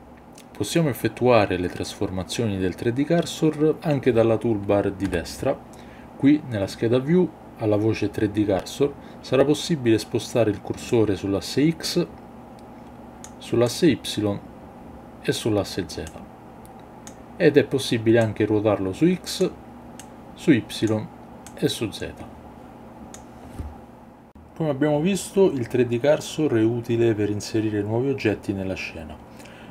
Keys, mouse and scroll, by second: 5.0 n, 10.9-13.2 drag, 13.7-15.4 drag, 16.1-17.1 drag, 18.2-19.4 drag, 20.0 click, 21.5-23.1 drag.